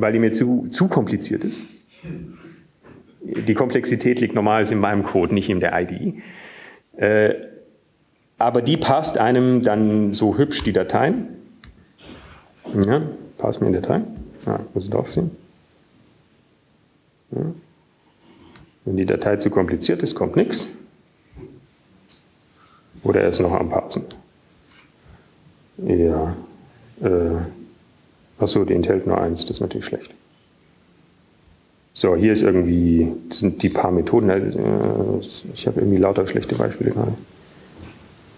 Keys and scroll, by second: 0.4-1.1 typing, 13.6 Up, 14.1 Down, 14.1 Return.